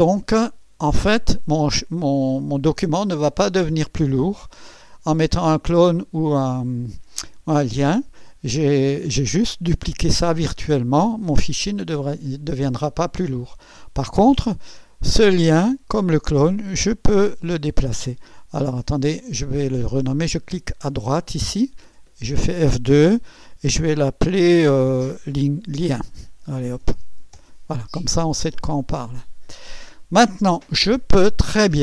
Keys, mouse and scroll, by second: 0.0-0.6 alt+scroll down 2, 2.3 click, 17.4 click, 21.2 click, 21.9 F2, 25.6-27.3 typing, 27.4 Return, 28.9 click.